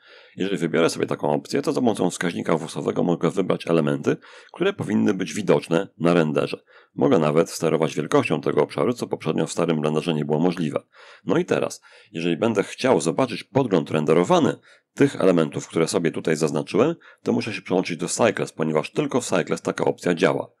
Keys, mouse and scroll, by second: 1.2-3.8 drag, 6.1-8.8 drag, 9.3-10.8 drag, 13.5-15.6 middle drag, 16.9 click, 18.2 click.